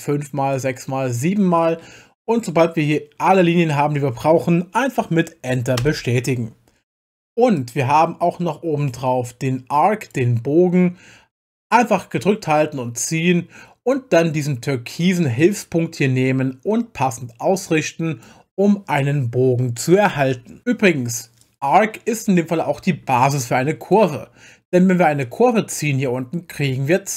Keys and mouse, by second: 0.5 click, 1.1 click, 5.8 Return, 7.6-10.1 drag, 12.2-13.9 drag, 15.4 click, 20.1 Return, 21.4-23.9 drag, 25.2 click, 25.7-27.1 drag.